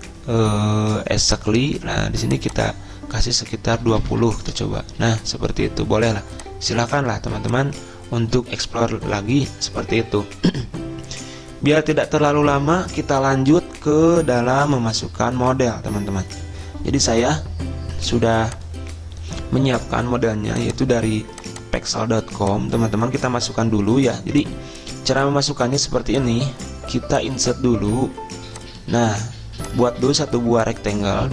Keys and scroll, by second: 4.1-5.0 typing.